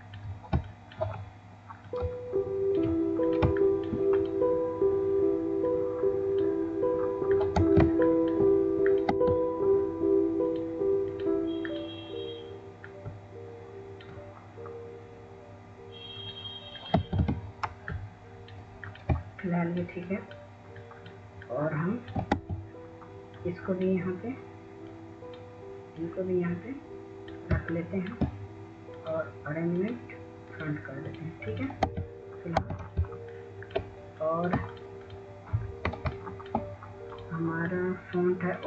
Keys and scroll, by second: 10.4 w, 11.1 w, 11.3 w, 12.0 w, 19.8 w, 25.2 w, 34.8 w, 35.5 w, 35.9 ctrl+space, 36.4 ctrl+space, 36.6 ctrl+space, 36.8-37.5 scroll, 37.5 ctrl+space.